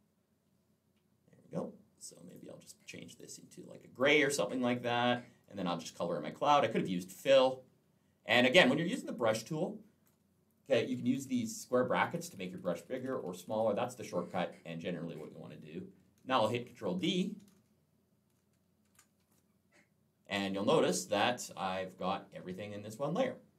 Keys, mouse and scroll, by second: 2.1 click, 3.0 click, 4.6 click, 5.2 click, 10.8-13.5 typing, 13.7 click, 18.7 ctrl+d.